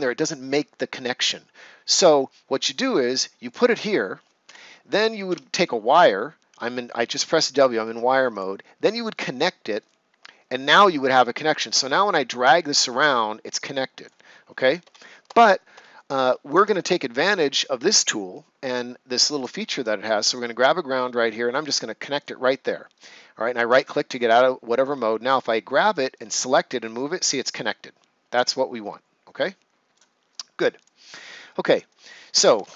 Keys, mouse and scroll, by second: 3.4 click, 4.4 Escape, 5.2 w, 8.3 click, 9.7 right click, 11.6 click, 14.7 ctrl+z, 19.3 click, 22.9 right click, 25.2 click, 31.8 right click, 32.5 ctrl+s.